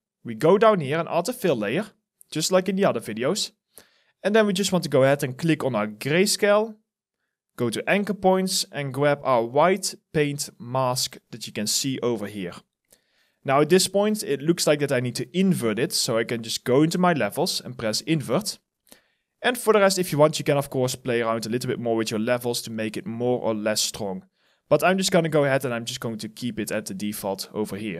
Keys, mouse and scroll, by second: 11.3 alt+middle click, 11.8 alt+right click, 12.8 alt+click, 13.3 alt+middle click, 26.6 alt+right click.